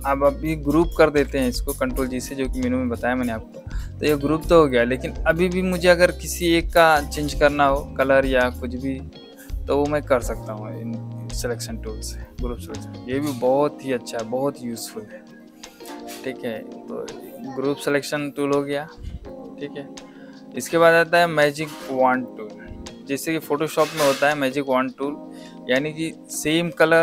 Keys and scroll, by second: 1.0 ctrl+g.